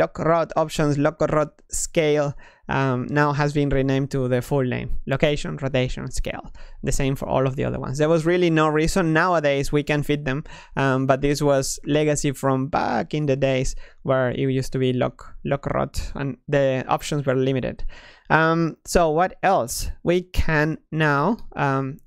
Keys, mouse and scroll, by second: 14.7 t, 17.2 click, 17.7-20.7 middle drag, 21.3 Tab.